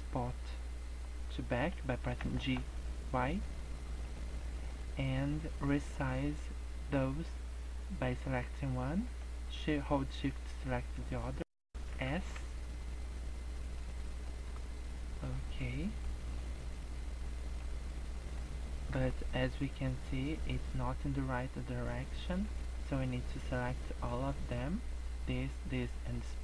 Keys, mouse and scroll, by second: 1.9 g, 4.4 middle click, 4.6-6.1 scroll up 6, 6.1 click, 10.3 shift+click, 10.9-11.3 scroll down 2, 11.3 scroll up 1, 11.9 s, 14.2 middle click, 15.5 scroll down 1, 15.6 middle click, 16.6 middle click, 17.7 scroll down 1, 17.9 middle click, 18.9 KP_0, 19.8-20.1 scroll down 4, 20.2 scroll up 2, 21.7 scroll down 2, 22.1 middle click, 22.6 scroll down 1, 22.7 middle click, 23.3 scroll down 1, 23.9 middle click, 26.1 shift+click.